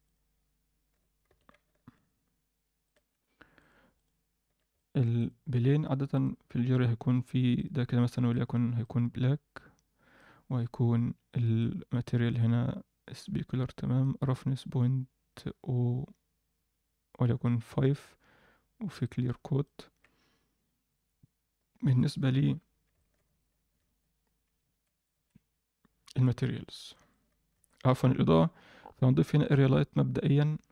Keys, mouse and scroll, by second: 0.0 click, 0.3-0.9 scroll up 1, 0.9 g, 3.0-3.5 scroll down 2, 3.5 click, 3.9 click, 4.4 z, 4.7 middle drag, 5.1 click, 5.4 scroll down 1, 6.1 click, 6.1 scroll down 1, 6.9-7.5 scroll down 1, 7.5 click, 7.5 scroll down 1, 10.5-11.5 scroll down 1, 11.5 click, 11.5-11.8 scroll down 1, 12.5-13.6 scroll down 1, 14.0-17.7 drag, 17.9-19.0 scroll down 1, 19.0 click, 19.0-19.6 scroll down 1, 21.3-21.8 scroll down 1, 21.8 scroll down 1, 21.8 KP_1, 22.9 alt+shift+middle drag, 23.3 ctrl+alt+right click, 23.8 shift+a, 25.0 shift+click, 25.9-26.6 scroll down 2, 26.6 click, 27.1 shift+right click, 27.5 shift+a, 29.8-30.3 scroll down 2.